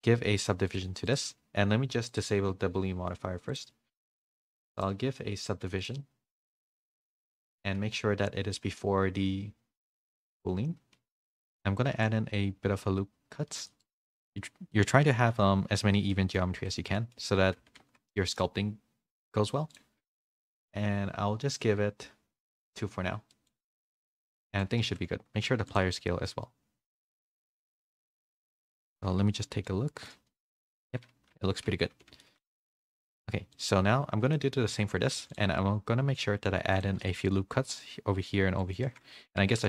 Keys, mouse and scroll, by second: 0.7-2.2 drag, 3.5-6.6 drag, 8.2-10.3 drag, 11.1 middle click, 11.9 Tab, 11.9 ctrl+r, 16.1 middle click, 16.5 Tab, 16.9 middle click, 17.6 a, 17.8 a, 18.0 middle click, 19.0 middle click, 19.7-20.8 drag, 22.5 click, 23.3-24.4 middle drag, 24.8 ctrl+a, 26.2 middle click, 27.0 a, 27.7 click, 27.7 a, 29.4 /, 29.6 middle click, 31.3 /, 31.9 s, 34.3 middle click, 34.7 Tab, 35.1 ctrl+r, 37.7 ctrl+r, 39.1 ctrl+z.